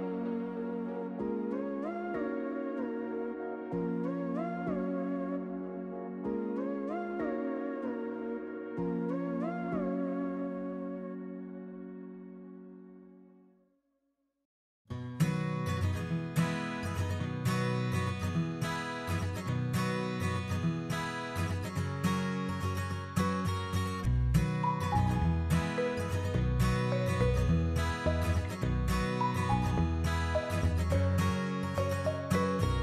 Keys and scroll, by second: 14.1 1, 15.7 BackSpace, 16.1 2, 16.4 Tab, 16.5 2, 17.2 Return, 20.6 1, 20.8 Tab, 21.2 Return, 23.4-26.7 typing, 29.5 Delete, 32.0 1, 32.2 space.